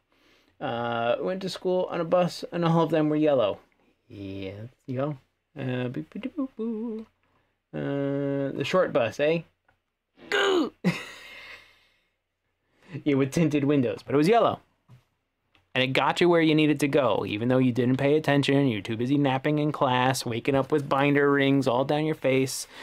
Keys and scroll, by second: 18.0 w.